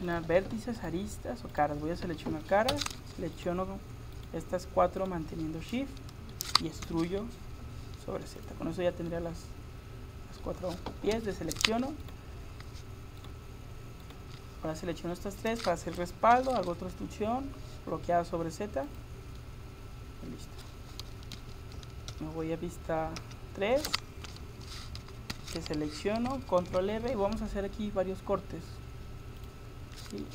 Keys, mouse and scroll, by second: 0.1-3.1 drag, 2.5 right click, 3.3-6.9 right drag, 6.9 e, 9.0 middle click, 10.2 middle click, 10.4 middle click, 11.2 a, 12.1-16.4 right drag, 16.4 e, 19.4-21.4 drag, 21.4 a, 22.1 KP_1, 23.2 KP_3, 25.0 a, 25.5 a, 26.6 ctrl+r.